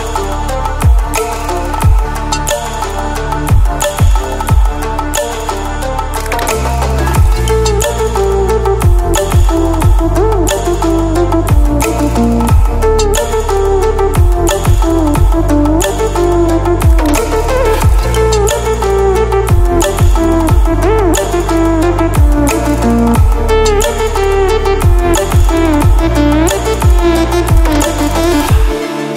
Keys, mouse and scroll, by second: 0.0 click, 5.2 click, 13.9 ctrl+w, 15.9 ctrl+w, 17.4-20.0 drag.